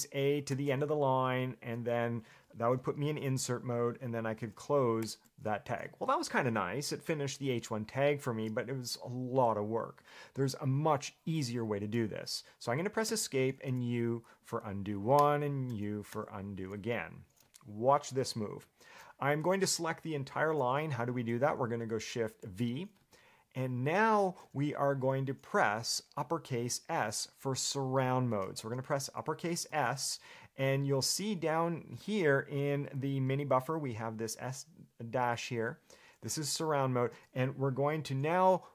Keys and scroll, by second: 0.7 shift+a, 4.5 shift+,, 5.2 /, 13.3 Escape, 13.9 u, 15.4 u, 15.9 u, 16.3 u, 22.6 shift+v.